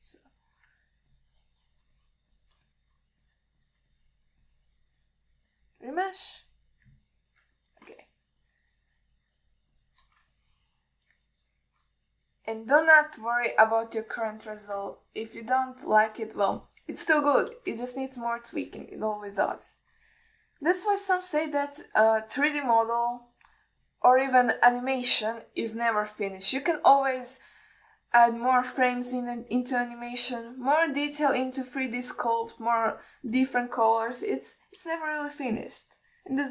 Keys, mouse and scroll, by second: 0.2 click, 1.2 alt+middle click, 2.4 shift+click, 3.3 click, 3.6 click, 3.9 alt+middle drag, 4.5 drag, 4.9 click, 5.2 middle drag, 5.7 middle drag, 6.3 click, 7.1-8.2 drag, 8.7 KP_1, 9.7-10.8 shift+drag, 11.0 shift+drag, 11.6-13.0 ctrl+middle drag, 14.4 alt+shift+middle click, 15.8 ctrl+alt+middle click, 16.9 middle click, 17.6-18.8 shift+drag, 19.1 ctrl+alt+middle click, 19.4 alt+middle click, 19.8 click, 20.8 middle click, 21.4 click, 22.0-23.3 middle drag, 23.8-24.8 drag, 25.1-26.9 middle drag, 27.3 click, 28.0 middle drag, 28.6 click, 29.8 middle click, 30.6 click, 31.6 alt+middle click, 32.5 click, 33.3-33.8 alt+middle drag, 34.1 click, 34.7 ctrl+alt+middle drag, 35.4 KP_1, 36.1-36.5 shift+drag.